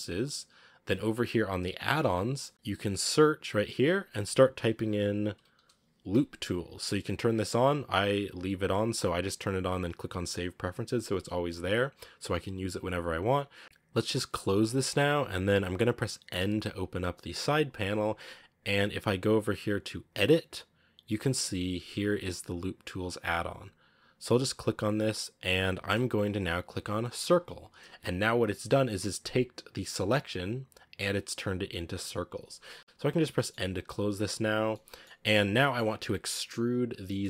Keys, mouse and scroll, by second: 16.3 n, 27.2-33.1 drag, 33.1 scroll down 1, 33.2 middle click, 33.7 n, 34.6 middle click, 35.1 scroll up 1, 35.4-37.2 middle drag.